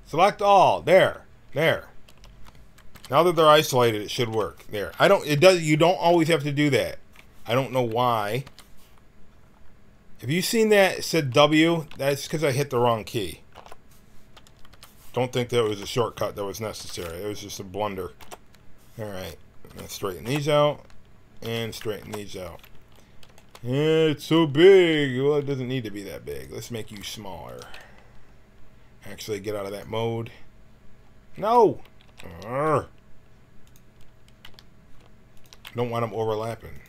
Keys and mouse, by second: 2.0 a, 2.8 l, 4.1 alt+e, 5.3 l, 6.1 alt+e, 6.1 alt+w, 8.4 l, 11.3 ctrl+z, 11.9 ctrl+z, 13.5 alt+e, 14.6 l, 15.6 alt+e, 16.7 l, 18.1 alt+e, 19.6 l, 20.2 alt+e, 21.4 l, 21.9 alt+w, 23.4 alt+e, 25.2 g, 26.7 g, 29.6-32.0 drag, 32.0 ctrl+z, 33.6-35.4 drag, 34.4 g.